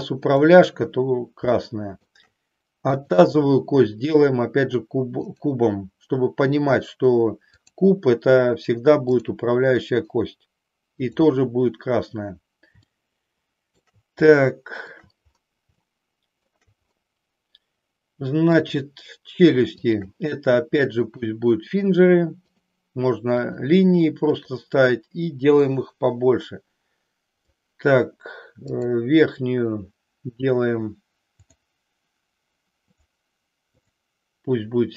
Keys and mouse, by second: 0.4 click, 1.5 shift+middle click, 2.9 click, 5.2-7.8 drag, 9.0 click, 11.0 click, 12.8-13.8 shift+middle drag, 14.5 shift+middle click, 15.9 shift+middle click, 20.0 shift+click, 21.1-22.7 drag, 23.5 click, 25.7-27.6 drag, 28.8 click, 31.5 click, 33.9 click.